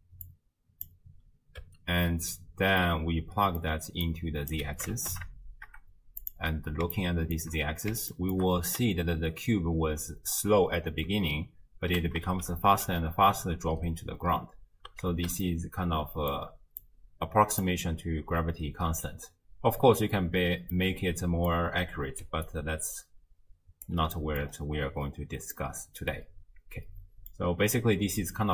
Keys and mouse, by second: 0.3-0.9 drag, 1.6 space, 2.5 space, 2.9 click, 4.1-4.6 drag, 4.9 shift+space, 6.2 click, 6.9-7.4 shift+drag, 8.2 shift+click, 8.6 space, 11.8 space, 12.5 space, 14.7 space, 15.5 middle click, 16.8 click, 20.8 click, 21.0 middle click, 21.1 click, 21.3 middle click, 21.3 click, 21.5 middle click, 22.3 d, 22.5-23.9 drag, 23.9 d, 24.2 click, 25.5-27.5 drag.